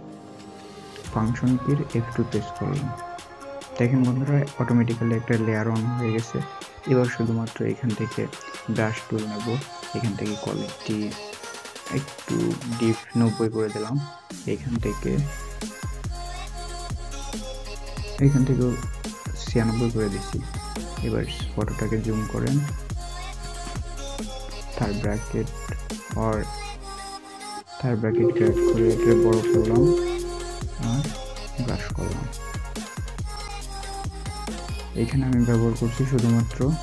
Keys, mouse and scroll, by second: 2.2 shift+F2, 21.2 alt+scroll up 1, 22.6 scroll up 1, 27.8-29.2 typing, 30.3 typing, 34.8-35.4 scroll down 1, 35.4 typing.